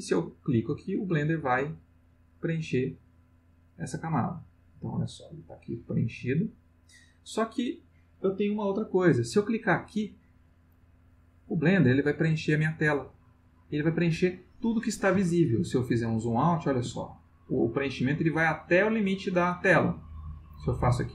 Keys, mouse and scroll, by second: 0.8 click, 2.0 click, 4.3 click, 6.4 click, 10.7 click, 15.8-16.9 ctrl+middle drag, 20.5 click.